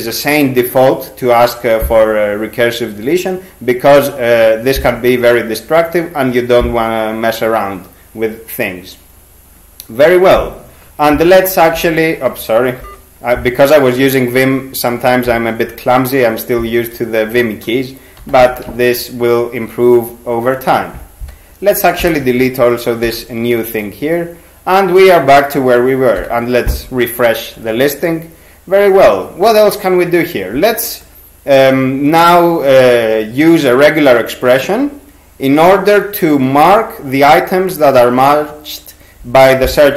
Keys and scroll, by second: 11.5 typing, 12.8 ctrl+g, 18.2 n, 18.4 n, 22.0 shift+d, 23.1 y, 26.2 g.